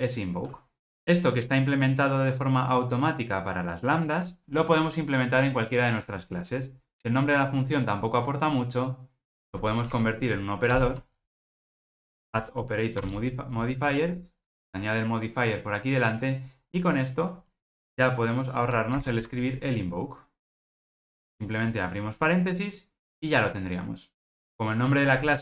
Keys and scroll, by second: 10.8 alt+Return, 19.0 alt+Return.